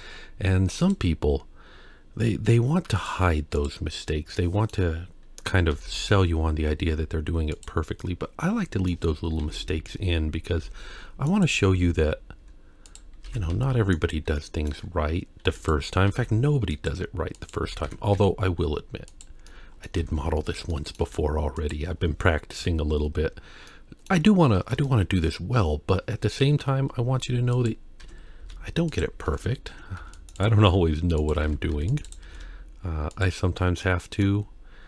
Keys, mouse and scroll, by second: 3.0 click, 4.4 middle click, 5.7 r, 8.0-8.9 middle drag, 9.4 KP_3, 11.0 g, 11.7 Tab, 12.4 z, 13.3 alt+a, 13.5 c, 14.4 middle click, 15.5 2, 15.6 click, 16.1 g, 17.4 click, 17.6 g, 19.5 middle click, 20.0 Tab, 20.7 middle click, 21.1 z, 22.6 KP_1, 23.7-24.1 middle drag, 24.3-24.8 scroll down 2, 24.8-25.2 shift+middle drag, 26.4 KP_1, 26.9 scroll up 1, 27.6 click, 28.0 Tab, 28.4 z, 29.3 alt+a, 29.7 1, 30.0 c, 30.6 g, 31.4 alt+a, 31.7 c, 32.2 g, 33.5 scroll down 1, 33.9 middle click, 34.6-34.8 scroll down 1.